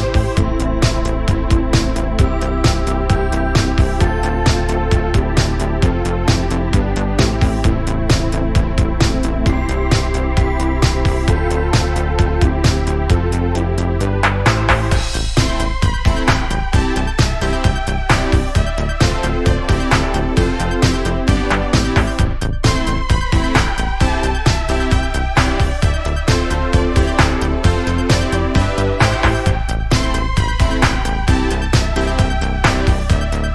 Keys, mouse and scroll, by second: 0.0 scroll up 1, 0.3-0.9 shift+middle drag, 0.9 scroll up 1, 1.2 shift+middle click, 1.7 Tab, 2.1-2.5 scroll up 1, 2.5 Tab, 2.9 middle click, 3.3-3.6 scroll up 1, 3.6 scroll down 1, 3.8 Tab, 4.3 shift+middle click, 4.7-5.6 scroll up 1, 5.6 click, 5.9 middle click, 6.3-6.8 scroll up 1, 6.8 click, 7.3 shift+click, 7.5 shift+click, 8.2 g, 9.9 click, 10.8 shift+click, 11.0 shift+click, 11.5 click, 12.4 shift+click, 12.7 shift+click, 13.4 g, 15.5 click, 16.1 shift+click, 16.5 shift+click, 17.0 KP_Decimal, 17.3 scroll down 1, 17.5 middle click, 17.8 scroll up 1, 18.2 middle click, 19.0 click, 20.1 ctrl+z, 20.3 middle click, 20.9 1, 21.2 click, 21.8 g, 23.1 middle click, 23.8 click, 24.0 g, 25.3 click, 25.8 g, 26.9 middle click, 27.6 2, 27.9 click, 28.5 click, 28.9 shift+click, 29.3 shift+click, 30.3 click, 31.2 middle click, 32.0 ctrl+r, 33.2 middle click.